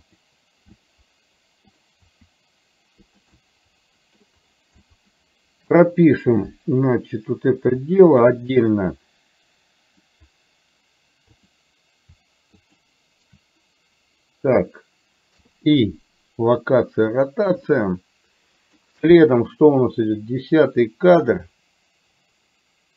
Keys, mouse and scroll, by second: 0.9 middle click, 2.2 r, 3.4 middle click, 4.9 middle click, 8.3 shift+click, 12.8 shift+click, 17.8-18.9 middle drag, 19.8-22.9 drag.